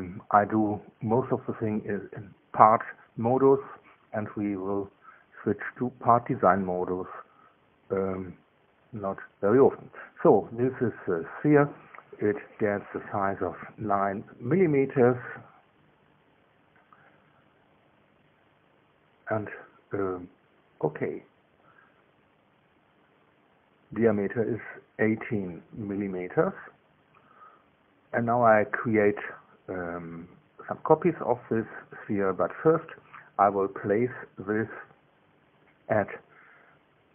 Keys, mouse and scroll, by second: 7.3 click, 11.0 click, 13.9 click, 20.2 KP_9, 21.1 KP_Enter, 33.2 click, 34.3 click, 35.9 scroll down 1.